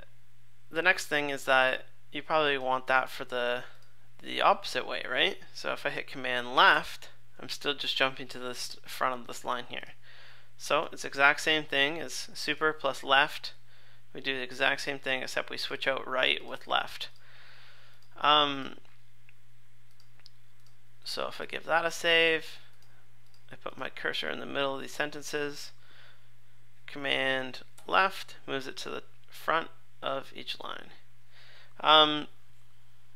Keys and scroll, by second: 0.9 super+z, 6.7 super+Left, 11.4 super+/, 21.4 super+s, 27.8 super+Left.